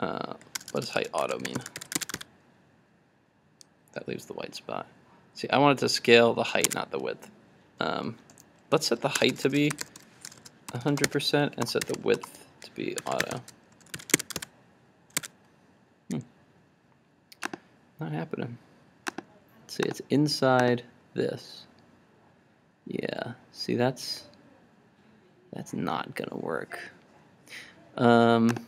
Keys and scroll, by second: 2.0 super+s, 2.2 super+r, 6.7 super+Tab, 14.2 super+s, 14.3 super+Tab, 14.4 super+r, 15.3 super+Tab.